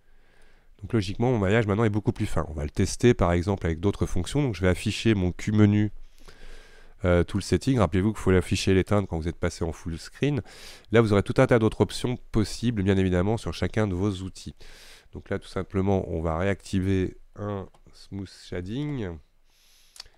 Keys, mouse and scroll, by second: 0.5 middle click, 1.3-3.3 scroll up 6, 7.6 q, 9.1 q, 14.3-14.8 scroll down 4, 14.8-19.3 scroll up 1.